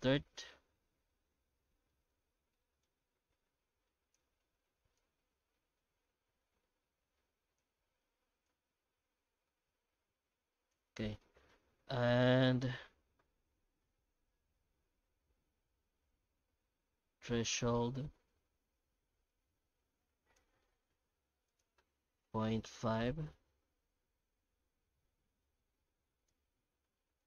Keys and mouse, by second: 0.0 ctrl+space, 1.1 middle click, 1.9 middle click, 2.9-4.2 drag, 4.9-7.6 drag, 8.6-10.7 shift+drag, 11.2 middle click, 14.5-16.0 middle drag, 17.5-20.4 shift+drag, 20.6 middle click, 21.5-23.9 drag.